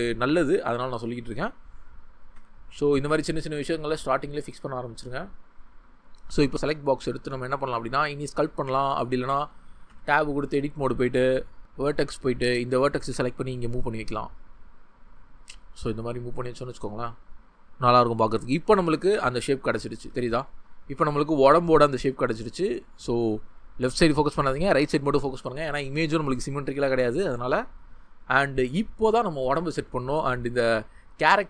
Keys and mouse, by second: 2.4 Tab, 9.9 Tab, 11.6 1, 11.9 w, 13.0 g, 14.3 click, 17.6 g, 20.0 Tab, 23.0 ctrl+click, 29.9-31.4 middle drag.